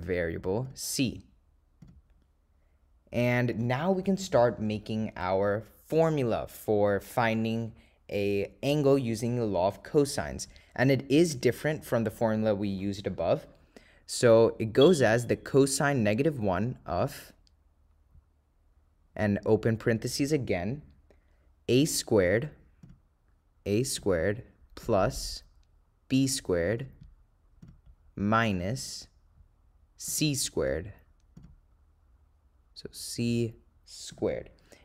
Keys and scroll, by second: 3.6 Return, 20.0 (, 28.6 -.